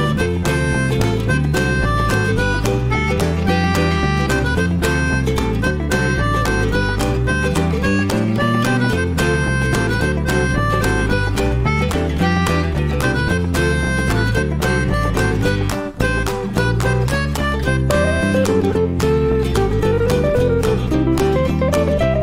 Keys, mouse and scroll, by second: 0.1 click, 0.4-3.6 shift+middle drag, 3.6 ctrl+s, 4.1-5.3 middle drag, 5.3 click, 5.6 scroll down 1, 5.8-6.7 middle drag, 6.7 F4, 16.4 drag, 16.7 alt+middle click, 17.0 alt+middle click, 17.7-18.1 scroll up 1, 18.5 click, 18.8-19.5 shift+middle drag, 19.5 click, 21.7-22.2 shift+middle drag.